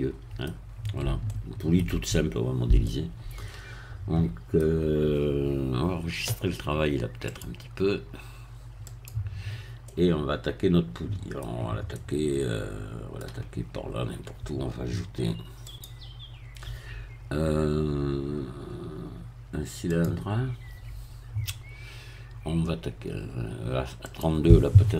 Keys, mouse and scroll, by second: 0.7-1.0 scroll down 1, 1.3 shift+middle click, 2.9-4.7 middle drag, 7.3 click, 8.9 click, 9.9-11.5 middle drag, 11.5 scroll down 1, 11.9-14.1 middle drag, 15.7 click, 19.9-21.1 drag, 24.1 click.